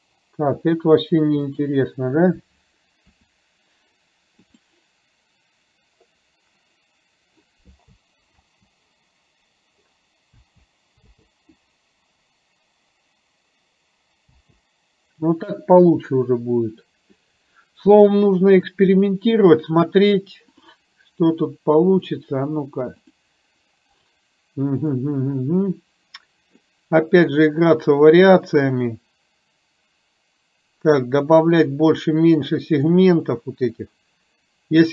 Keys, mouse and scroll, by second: 1.4 click, 3.3 r, 8.4 space, 10.5 space, 11.2 space, 14.4 space, 19.1 click, 20.6 click, 21.9 click, 23.1 click, 24.9 click, 27.8-28.9 drag, 33.8-34.9 drag.